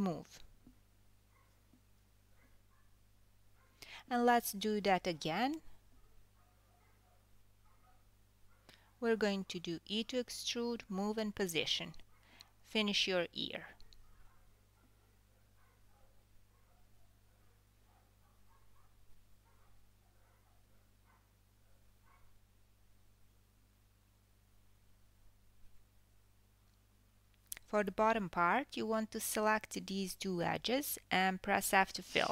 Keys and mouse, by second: 2.4 g, 5.7 KP_3, 6.6 KP_1, 8.5 e, 10.2 e, 13.1 e, 16.8 e, 20.3 KP_3, 21.4 g, 24.3 click, 24.4 g, 26.6 KP_1, 28.9 click, 31.2 shift+click.